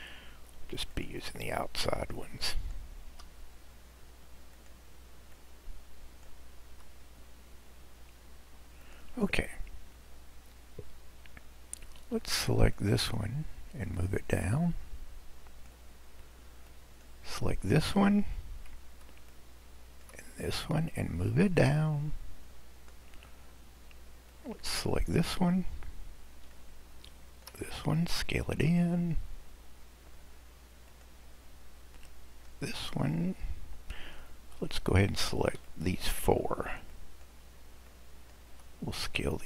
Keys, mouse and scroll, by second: 1.9 click, 3.1 s, 5.4 click, 6.5 s, 10.0-10.5 scroll down 1, 10.5-12.8 scroll up 2, 12.8 click, 14.1-16.9 drag, 19.3 shift+click, 21.0 click, 24.3 click, 26.6 shift+click, 28.5 s, 32.0 click, 35.6 shift+click, 36.9 shift+click, 37.9 shift+click.